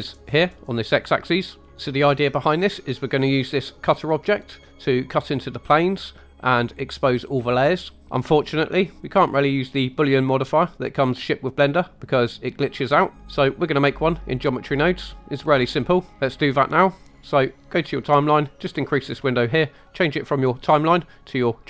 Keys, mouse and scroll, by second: 4.0 click, 4.8 click, 8.0 click, 9.0-13.3 drag, 16.1 right click, 18.1 click, 20.2-21.6 drag.